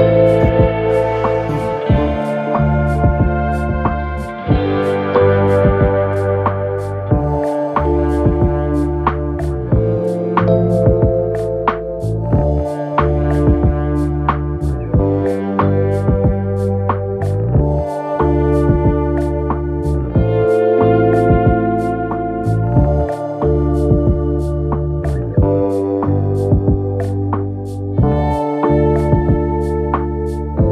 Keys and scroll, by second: 0.0-0.3 typing, 0.2 Return, 0.5 ctrl+0, 1.4 alt+shift+Return, 2.8 Down, 2.9 Down, 3.1 Up, 3.2 Return, 11.1 ctrl+BackSpace, 11.8-12.5 typing, 27.6 ctrl+alt+shift+t, 29.2 ctrl+alt+shift+z.